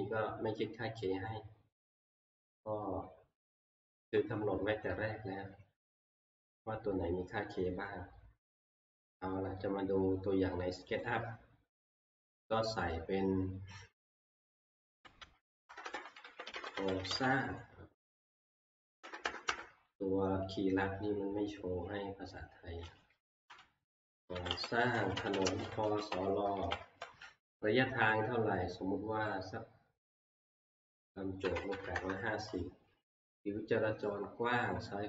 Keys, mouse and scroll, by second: 11.0-16.2 drag, 14.8-17.6 typing, 19.0 k, 19.2 k, 19.5 k, 20.9-21.7 typing, 23.5-27.1 typing, 31.2-32.4 typing, 34.6-35.0 drag.